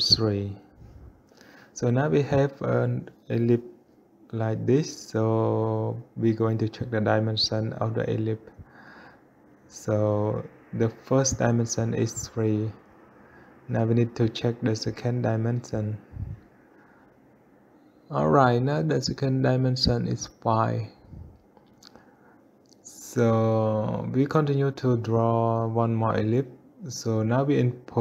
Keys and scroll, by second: 0.4 Return, 0.8 3, 27.7 5.